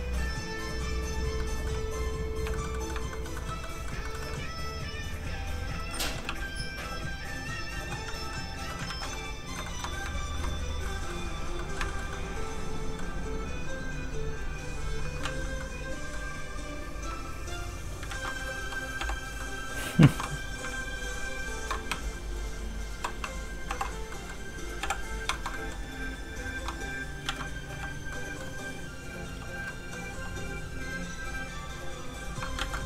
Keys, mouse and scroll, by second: 1.4 middle click, 1.9 f, 2.0 click, 2.5 shift+middle click, 2.7 middle click, 2.8 middle click, 3.1 shift+middle click, 3.6 middle click, 3.7 middle click, 4.0 shift+middle click, 4.2 middle click, 4.3 middle click, 4.9 click, 5.8 ctrl+z, 6.0 middle click, 6.3 f, 6.5 click, 7.9 middle click, 8.7 ctrl+middle click, 8.9 ctrl+z, 9.1 middle click, 9.6 shift+middle click, 10.0 ctrl+middle click, 10.2 ctrl+s, 10.8 s, 10.9 middle click, 11.9 shift+middle click, 12.1 middle click, 14.3 click, 15.2 ctrl+z, 15.6 middle click, 15.7 middle click, 16.5 click, 18.0 ctrl+click, 18.1 ctrl+z, 19.0 ctrl+h, 19.4 middle click, 20.1 shift+middle click, 20.6 scroll up 1, 20.9 ctrl+shift+click, 21.9 shift+click, 22.0 w, 23.7 alt+m, 24.1 middle click, 24.8 alt+h, 25.2 scroll down 1, 25.3 shift+middle click, 25.5 middle click, 25.6 middle click, 26.1 click, 27.3 ctrl+z, 27.7 f, 27.9 click, 28.1 middle click, 29.3 f, 29.5 click, 29.7 middle click, 30.1 f, 30.3 click, 32.6 ctrl+z, 32.8 middle click.